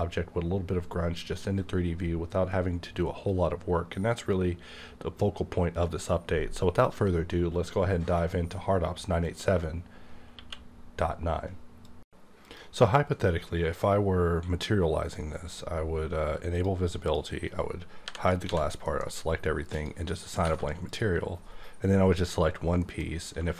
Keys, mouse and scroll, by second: 10.3 q, 16.5 click, 17.0 click, 18.4 a, 18.8 alt+m, 19.7 click, 20.4 alt+a, 20.9 click, 22.8 m.